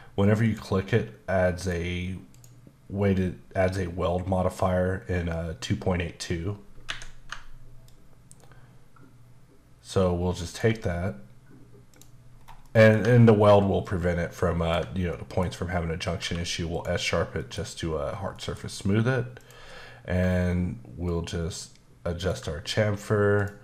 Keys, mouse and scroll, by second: 0.4 click, 1.6 click, 2.3 click, 6.9 Escape, 7.9 ctrl+click, 12.3 scroll down 2, 12.6 middle click, 13.8 ctrl+click, 15.1 middle click, 16.2 q, 16.7 click, 17.4 middle click, 18.3 middle click, 19.4 click, 21.1 ctrl+click.